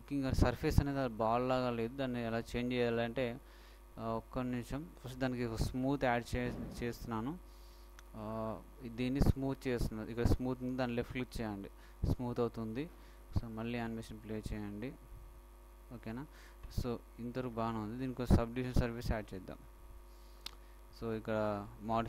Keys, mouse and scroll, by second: 0.1-0.7 scroll down 1, 2.7-5.5 middle drag, 5.7 Escape, 11.5-13.4 drag, 13.4 alt+a, 19.3 Escape, 19.5 Escape.